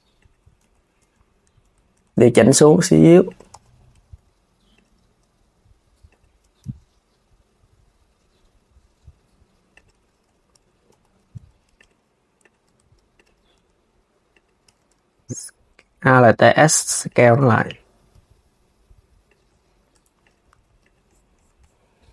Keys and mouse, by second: 0.3 z, 0.7 Tab, 1.3 Tab, 2.0 g, 3.1 KP_1, 3.8 g, 9.9 s, 10.6 KP_3, 11.0 Tab, 11.4 click, 12.1 click, 12.3 Tab, 12.8 click, 13.2 r, 14.3 z, 14.8 s, 15.7 alt+s, 16.8 alt+s, 17.3 click, 17.8 alt+s, 18.9 alt+s, 19.6 Tab, 19.9 click, 20.2 s, 20.5 click.